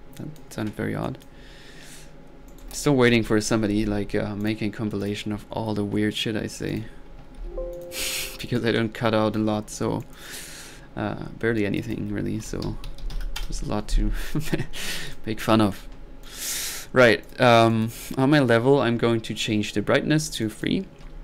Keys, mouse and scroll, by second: 0.2 click, 2.5 right click, 2.8-3.6 typing, 4.4 drag, 5.0 click, 6.7 click, 7.4 alt+n, 7.7-8.1 alt+drag, 8.6-9.7 alt+drag, 10.0-10.4 drag, 11.6 click, 14.3-14.7 drag, 14.9 click, 19.4 click, 20.4-20.8 drag.